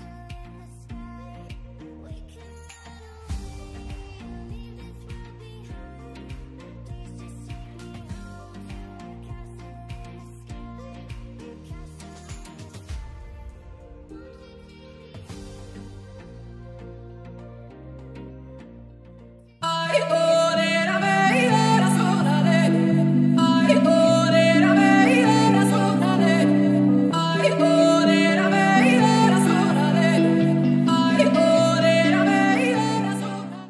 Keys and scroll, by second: 16.2-16.6 scroll down 1, 17.5 n, 17.8 scroll down 1, 18.1-18.4 scroll up 1.